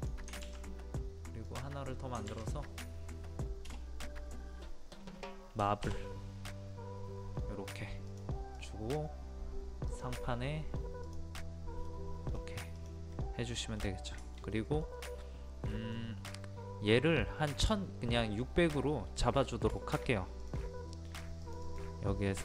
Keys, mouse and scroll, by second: 1.5 click, 3.7 BackSpace, 8.1-11.0 drag, 11.9 middle click, 12.3-12.8 scroll down 1, 12.8 click, 13.1 middle click, 13.8-14.2 scroll down 1, 14.2 shift+middle click, 19.4-19.7 scroll down 1, 19.8 shift+middle click, 20.4 click, 20.9 middle click, 21.1-21.4 scroll up 1, 21.4 click, 22.1-22.4 scroll up 1.